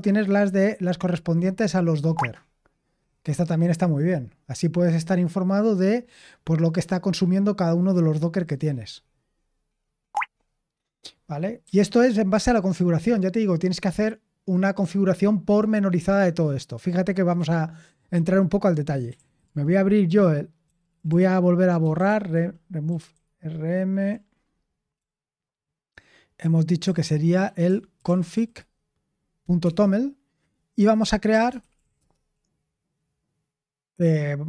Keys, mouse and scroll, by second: 10.0-11.6 scroll up 1, 11.6 typing, 18.8-23.6 typing, 24.1 Right, 24.9-28.8 typing, 29.6 Return, 31.0-32.3 typing.